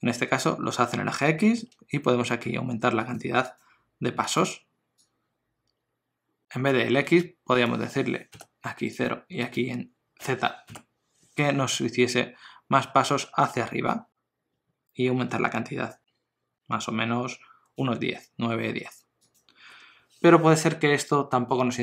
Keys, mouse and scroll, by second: 1.4 ctrl+middle click, 3.1 click, 7.7 click, 14.0 click, 19.3 click.